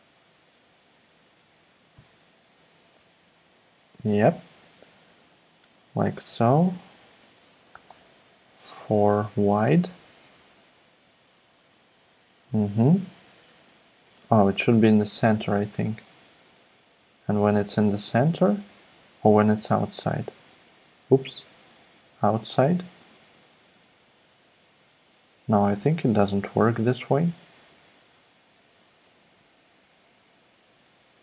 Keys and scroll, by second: 1.9 shift+x, 7.7 4, 7.9 Return, 9.8 Down, 10.0 Down, 10.2 Right, 10.4 Right, 29.2 Right, 29.4 Right, 29.6 Down, 29.8 Down.